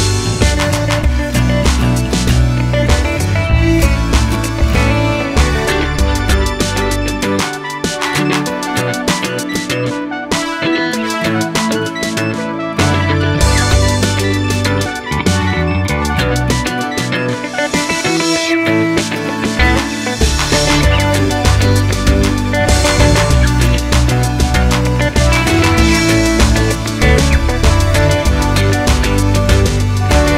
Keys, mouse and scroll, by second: 7.7 click, 8.7-11.7 drag, 11.7-17.5 right drag, 17.5 Tab, 17.5-25.6 middle drag, 18.0 scroll down 1, 23.4 z, 25.6 click, 26.0 scroll down 1, 26.6-28.7 middle drag, 28.7-29.4 drag.